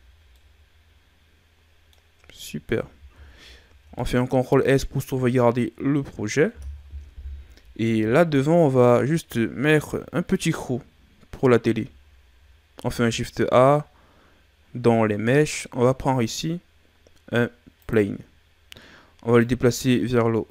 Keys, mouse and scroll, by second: 0.0 scroll down 3, 0.3-2.1 middle drag, 2.1-2.7 scroll down 6, 2.7 ctrl+s, 3.2-3.7 shift+scroll down 4, 3.9-6.9 middle drag, 7.0 KP_1, 8.9 scroll up 1, 10.1 ctrl+scroll down 1, 12.7 shift+a, 19.3 click.